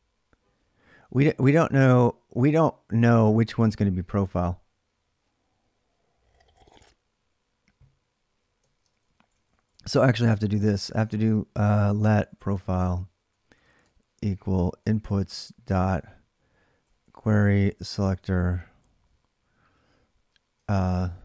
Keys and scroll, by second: 8.5 ctrl+[, 8.7-10.8 typing, 11.8-18.8 typing, 20.4-21.2 typing.